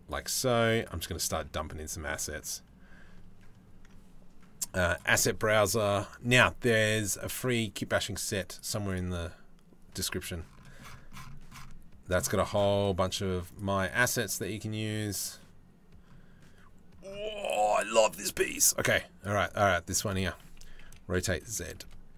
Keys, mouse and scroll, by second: 0.5 middle click, 1.8-4.6 drag, 8.5 click, 12.4 click, 13.1 click, 19.3 shift+middle click, 20.5 r.